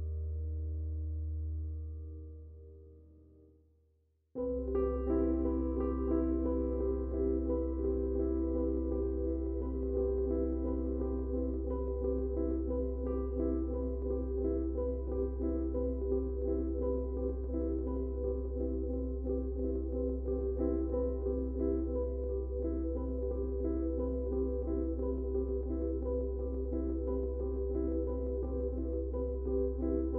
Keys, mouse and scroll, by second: 0.5 click, 1.8 Tab, 3.6 click, 5.8 Tab, 7.1-9.2 drag, 12.4 space, 12.5 click, 12.9 space, 14.0 ctrl+click, 17.5 click, 22.5-26.4 shift+drag, 28.8-30.1 drag.